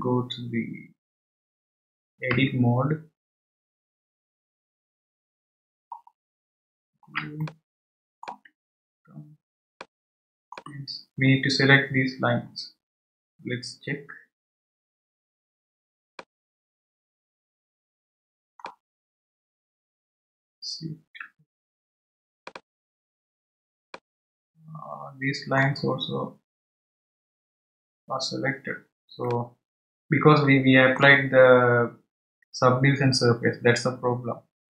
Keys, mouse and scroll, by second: 3.3 Tab, 5.8-7.2 scroll up 6, 7.8-9.4 shift+middle drag, 9.4 scroll up 2, 12.6-14.9 scroll down 1, 16.1-19.3 middle drag, 22.4 alt+shift+click, 24.2-26.9 middle drag, 28.0 scroll down 1, 29.3-32.4 middle drag.